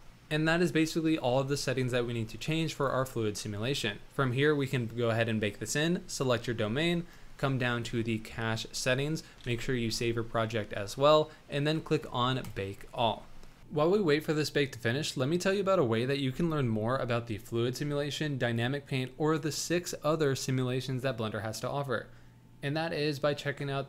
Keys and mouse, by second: 2.7 click, 9.4 ctrl+s.